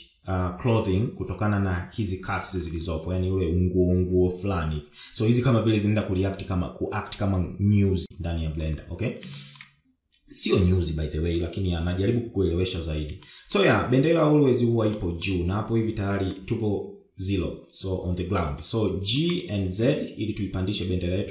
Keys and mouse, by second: 9.7 shift+middle click, 13.6 shift+middle click, 14.3 Tab, 15.2 shift+middle click, 19.5 g.